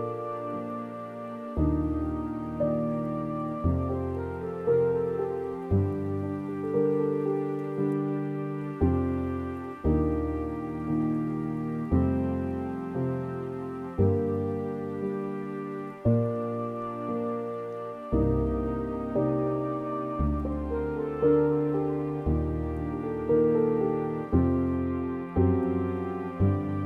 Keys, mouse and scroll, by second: 3.2 scroll down 2, 3.5 scroll up 2, 3.9 click, 4.6 middle click, 5.5-6.6 drag, 6.6-7.7 scroll down 3, 7.7 middle click, 8.1-9.1 scroll down 2, 9.1-10.6 drag, 10.6-12.5 scroll down 2, 12.5-15.1 drag, 15.1-15.5 scroll up 3, 15.5 middle click, 16.0 scroll down 2, 16.5-16.9 scroll up 8, 17.1 middle click, 17.7-18.0 scroll up 3, 18.0-19.3 middle drag, 19.3-26.8 drag.